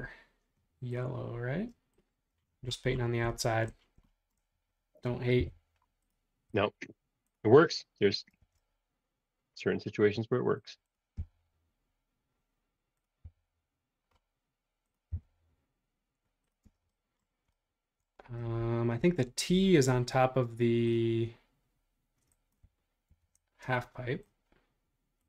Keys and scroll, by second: 2.3 space, 5.4 m, 8.4 super+z, 11.2 Up, 16.6 space, 23.1 shift+t.